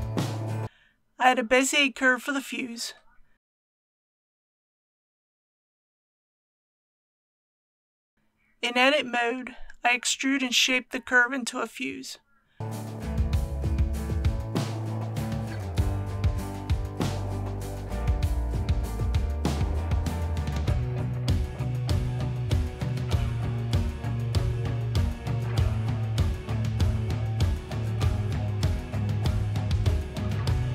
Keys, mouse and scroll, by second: 1.3 shift+a, 5.7 click, 6.9-7.4 typing, 8.1-8.9 scroll down 1, 10.3 a, 15.8 g, 16.3 z, 17.5 click, 17.8-19.5 typing, 20.6 click, 21.0 scroll up 1, 21.5 middle click, 22.5-22.9 typing, 24.0 click, 24.3-25.6 middle drag, 25.6 KP_1, 26.1 shift+middle click, 26.6 scroll down 1, 27.4 shift+middle click, 28.5 click, 29.3 g, 30.2 click, 30.5 r.